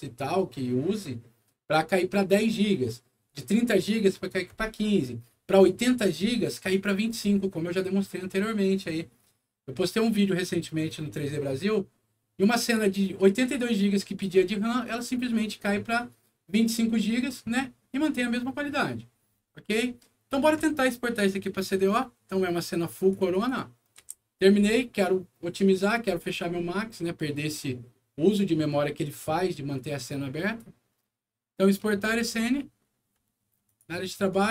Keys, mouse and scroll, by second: 21.2 middle click, 22.9 click, 23.3 click, 24.0 F10, 31.6 click, 33.6 click, 34.3 right click.